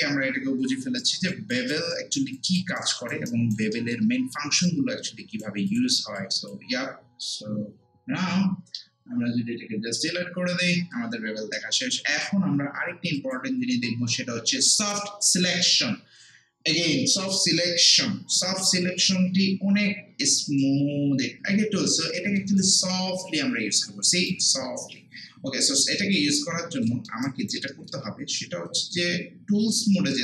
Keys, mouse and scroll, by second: 1.5 alt+click, 1.9 alt+right click, 2.4 alt+click, 2.8 alt+right click, 4.7 right click, 5.7 click, 7.0 scroll down 1, 10.7 scroll down 1, 11.4 scroll up 1, 11.6 alt+middle click, 13.2 click, 20.0 click, 20.6 shift+right click, 21.4 scroll down 1, 21.5 scroll up 1, 22.2 alt+middle click, 22.6-25.8 alt+right drag, 25.8-26.2 scroll up 1, 26.9 alt+middle click, 27.3 alt+right click, 27.7 alt+middle click, 29.0 right click.